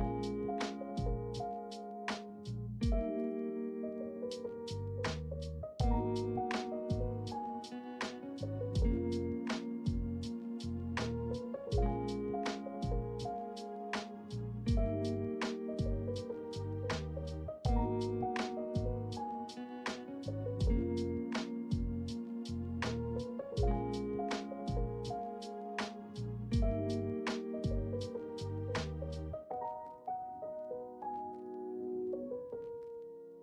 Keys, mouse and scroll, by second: 5.6 i, 7.9 i, 11.8 ctrl+middle click, 13.5 m, 16.1 middle click, 17.0 ctrl+middle click, 17.7 shift+middle click, 18.3 middle click, 20.4 alt+s, 23.5-24.9 middle drag, 25.8 Tab, 26.4-27.3 middle drag, 28.1 Tab, 28.1 middle click, 29.8-30.8 middle drag, 31.6 ctrl+middle click, 32.2 shift+middle click, 32.8 middle click.